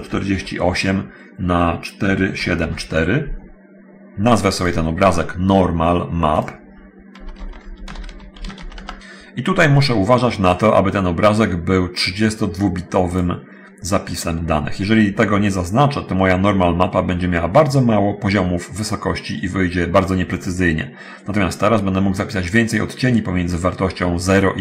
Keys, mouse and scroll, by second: 0.5 8, 0.8 Tab, 2.2 4, 2.6 7, 2.8 4, 4.4 click, 6.6 click, 7.4-8.7 typing, 13.3 click.